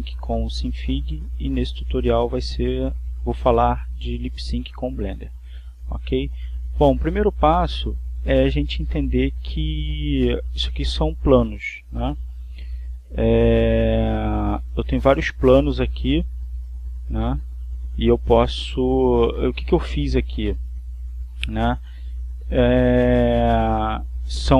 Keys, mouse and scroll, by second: 13.4 z, 15.0 z, 17.5 alt+z, 19.6 click, 21.8 click, 23.0 click.